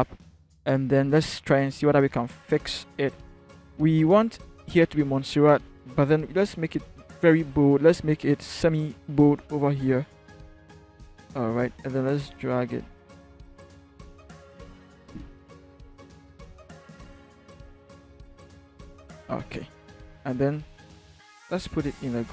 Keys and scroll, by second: 15.4 Up, 16.2 Right, 16.8 Right, 17.5 Right, 18.1 Down, 19.6 ctrl+Right.